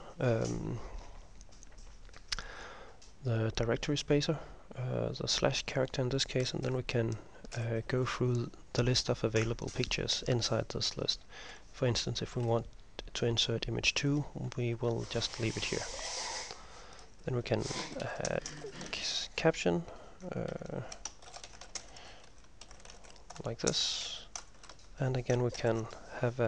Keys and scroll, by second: 6.8 ctrl+m, 7.6 ctrl+m, 15.0 Home, 15.2 End, 17.7-19.6 typing, 20.6 ctrl+Left, 20.8 ctrl+Left, 21.1-26.4 typing.